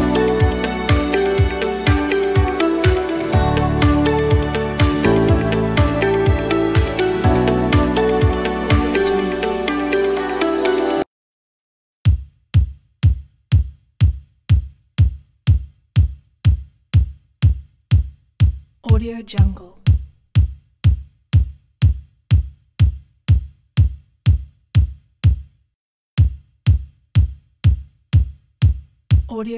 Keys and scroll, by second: 11.3 s.